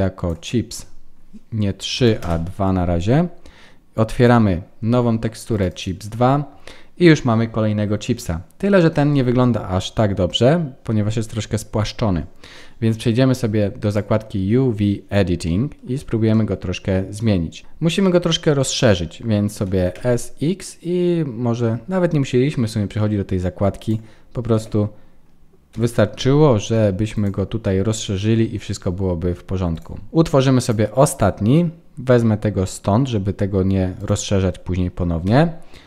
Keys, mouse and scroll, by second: 4.1 click, 9.8-11.5 scroll down 3, 29.7 click, 30.1 shift+middle click, 30.1-30.5 scroll up 4, 30.5 click, 31.0 scroll down 3, 33.9 click, 35.2 n.